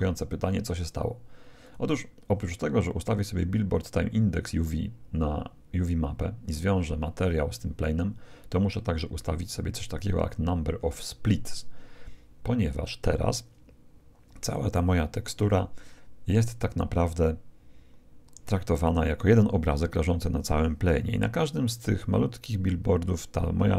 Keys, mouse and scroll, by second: 0.0 Escape, 1.6-3.3 drag.